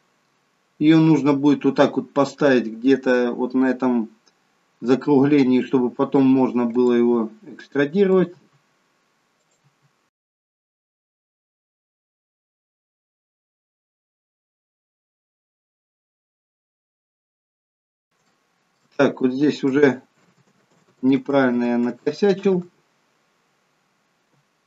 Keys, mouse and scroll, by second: 1.3-1.9 scroll up 3, 1.9-3.0 scroll down 2, 5.1 e, 6.9 e, 8.3 e, 9.7-13.7 typing, 16.0 e, 18.2 shift+middle click, 20.1 ctrl+z, 20.6 ctrl+z, 20.9 ctrl+z, 21.4 ctrl+z, 21.8 ctrl+z, 22.6 ctrl+z.